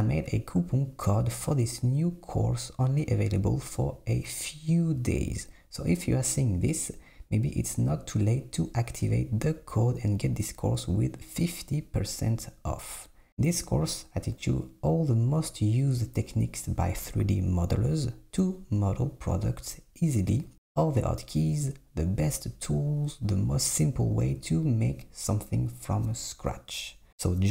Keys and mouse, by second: 1.4 click, 2.6 b, 4.0 s, 5.1 Tab, 5.7 alt+z, 7.2 Tab, 11.1 click, 13.1 shift+click, 14.1 shift+click, 15.2 click, 16.1-17.1 drag, 18.6 click, 19.2 click, 20.8-21.8 drag, 23.5 alt+z, 24.3 alt+z, 24.9-25.9 drag, 26.0 g, 27.0 e.